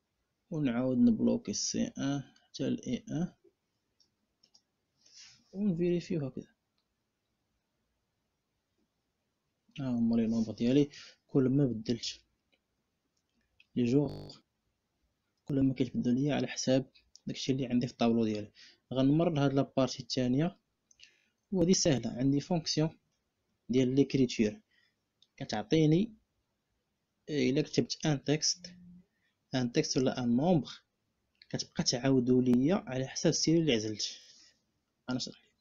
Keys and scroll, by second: 1.2 F4, 3.0 F4, 4.2 Return.